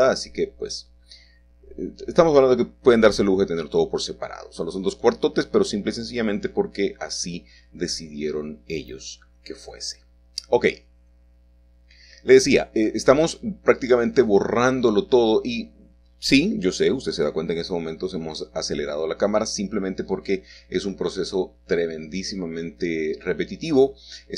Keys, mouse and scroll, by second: 0.1 g, 0.6 click, 0.9 scroll down 1, 1.5 middle click, 1.5 scroll down 1, 1.7 shift+middle click, 2.1-3.9 middle drag, 4.0 shift+middle click, 4.5 shift+middle click, 5.1 click, 5.1 ⇆, 5.9 click, 7.0 ctrl+click, 7.7 click, 9.1 click, 9.4 shift+click, 9.9 f, 10.1 middle click, 11.0 middle click, 11.3 ctrl+z, 11.7 scroll up 1, 12.0 Tab, 12.3 click, 12.6 click, 13.0 click, 13.0 x, 13.3 click, 13.5 click, 14.0-15.1 middle drag, 14.5 scroll down 1, 15.3 click, 15.3 Tab, 15.4 middle click, 15.6 scroll down 1, 15.8 shift+middle click, 16.2 click, 16.3 shift+middle click, 16.4 shift+click, 16.6 shift+middle click, 16.6 shift+click, 16.8 shift+middle click, 17.5 shift+middle click, 17.8 f, 18.2 scroll down 1, 19.2 scroll up 2, 19.3 scroll down 2, 19.5 middle click, 21.1 k, 21.5 middle click, 22.3 Escape, 22.3 middle click, 22.6 scroll up 1, 23.5 click.